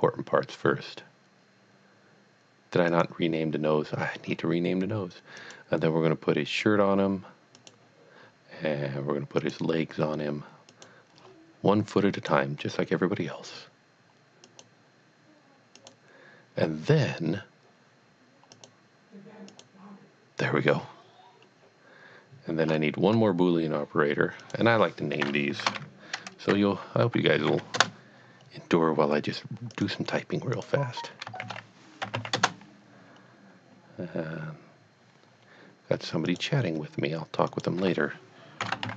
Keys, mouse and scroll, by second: 2.9 click, 4.3-5.3 scroll down 1, 5.4 click, 7.6 click, 8.2-9.4 scroll down 1, 9.4 click, 10.7 click, 11.2-12.1 scroll down 2, 12.2 click, 13.0 scroll down 1, 13.6-14.5 scroll down 1, 14.5 click, 15.8 click, 18.5 click, 18.8 click, 19.5 click, 22.6 click, 22.7-24.1 scroll up 3, 24.4 click, 25.7 b, 27.2-27.5 typing, 27.8 Return, 29.7 click, 30.5 click, 31.4 shift+e, 32.0 y, 32.3 Return, 36.2 Return, 36.3 click, 38.6 shift+n, 38.7 o.